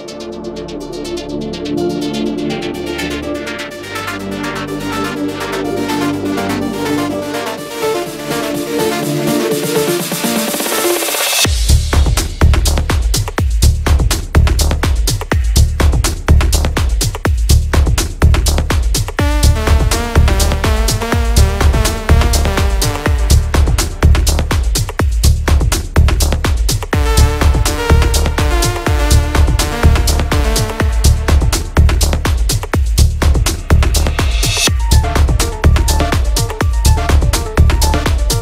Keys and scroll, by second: 3.4 ctrl+z, 16.3 Delete.